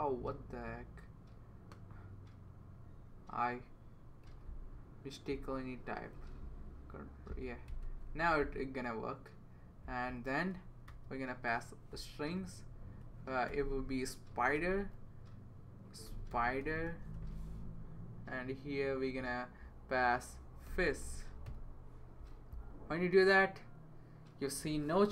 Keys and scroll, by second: 4.2 super+c, 6.1 super+v, 7.7 space, 8.1 super+v, 10.9 typing, 12.1 Down, 12.4 Right, 14.6 s, 15.8-17.6 typing, 20.4-22.0 typing.